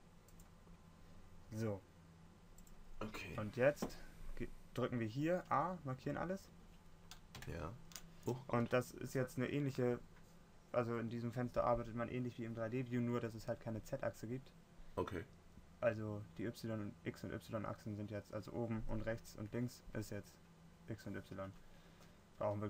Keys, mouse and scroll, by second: 5.8 a.